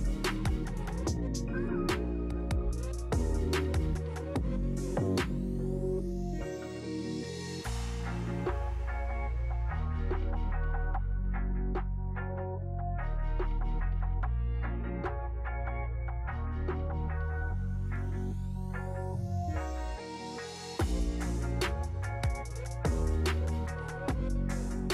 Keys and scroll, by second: 11.7 Escape.